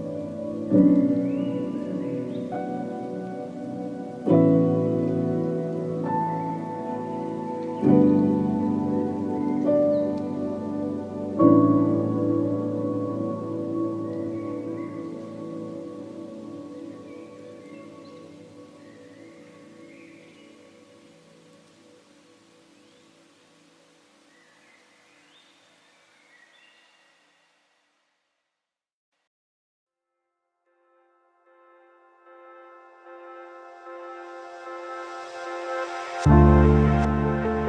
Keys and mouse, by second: 0.3 middle click, 1.4 shift+middle click, 2.0 middle click, 2.1 1, 2.7 shift+middle click, 3.1 middle click, 3.9 shift+middle click, 5.8 click, 6.0 g, 6.8 click, 7.0 g, 7.8 click, 7.9 g, 8.7 click, 8.9 g, 9.8 shift+middle click, 10.9 shift+middle click, 11.7 click, 11.9 g, 13.0 click, 13.1 g, 14.1 click, 14.3 g, 15.2 click, 15.3 g, 16.3 shift+middle click, 17.3 2, 17.5 alt+click, 18.5 middle click, 19.4 a, 19.8 shift+middle click, 20.2 1, 21.1 click, 21.3 g, 22.1 click, 22.2 g, 23.0 click, 23.1 g, 23.9 click, 24.0 g, 24.8 shift+middle click, 25.6-28.6 middle drag, 29.1 click, 29.3 g, 30.3 click, 30.4 g, 31.2 click, 31.3 g, 32.3 click, 32.4 g, 33.2 shift+middle click, 34.1 a, 34.5 a, 34.7 q, 35.3 a, 35.7 shift+middle click, 36.7 shift+middle click.